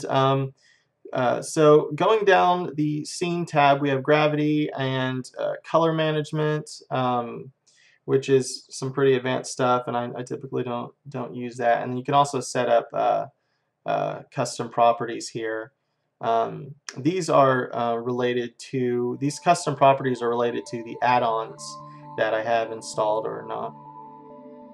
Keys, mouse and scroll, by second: 1.2-3.1 drag, 5.3-8.3 drag, 12.1-13.9 drag, 13.7-23.1 middle drag, 19.1-20.2 scroll up 1, 20.8 scroll down 1, 23.1-24.7 drag.